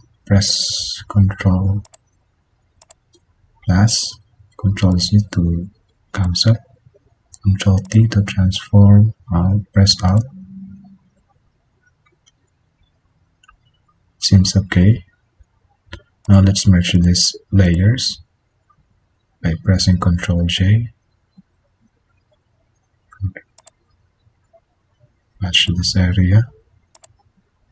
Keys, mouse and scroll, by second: 0.9 ctrl+=, 4.4 ctrl+z, 7.1 ctrl+t, 18.8 ctrl+e, 20.3 ctrl+-, 22.7 ctrl+=.